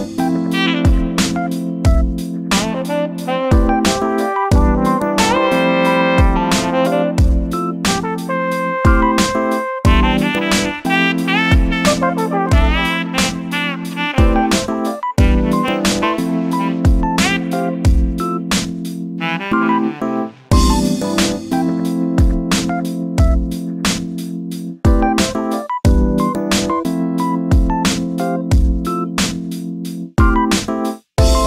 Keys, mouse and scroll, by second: 0.2 shift+d, 2.3 shift+d, 4.0 shift+d, 5.6 shift+d, 7.0 1, 7.5 click, 8.7 g, 11.4 scroll down 3, 11.6 middle click, 11.8 scroll up 1, 12.1 shift+middle click, 12.4 scroll down 3, 12.6 middle click, 12.9 KP_7, 13.7-14.2 scroll down 1, 14.2-15.8 shift+middle drag, 15.8 KP_1, 17.2-18.3 scroll down 3, 18.3 KP_7, 18.7-19.1 scroll up 2, 19.1 shift+middle click, 19.4-19.9 scroll up 1, 19.9 scroll down 1, 20.2-21.7 shift+middle drag, 21.7-23.1 scroll down 2, 23.1 a, 24.0 a, 24.7 x, 25.9 scroll down 3, 26.0-27.8 shift+middle drag, 27.8 KP_7, 28.3 a, 29.3-30.4 middle drag, 30.4 g.